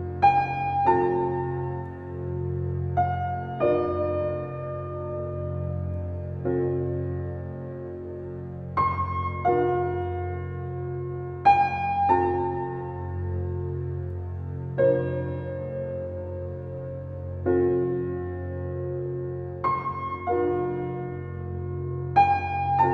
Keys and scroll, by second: 4.2 ctrl+j, 7.9 ctrl+t, 20.8 ctrl+t.